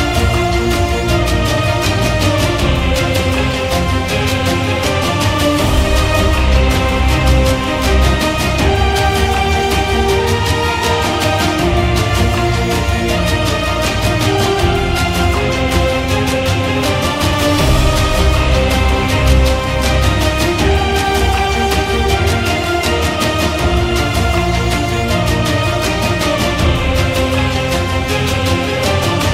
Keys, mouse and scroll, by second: 0.0-0.1 typing, 0.5 right click, 2.2 click, 12.5-15.6 drag, 15.8 click, 21.0 click, 23.7 click, 24.1 click, 24.6-24.9 click, 24.6 click, 25.1 click, 25.6 click, 25.7 click, 26.1 click, 26.2 click, 26.3 click, 26.7 click, 27.0 [, 27.1 [, 27.4 click, 28.0 click, 28.4 click, 28.6 click, 28.7 click, 29.0 click.